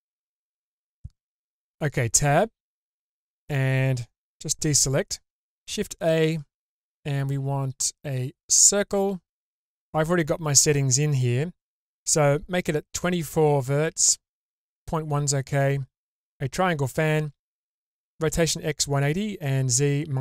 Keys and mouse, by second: 0.9 middle click, 1.8 Tab, 5.7 shift+a.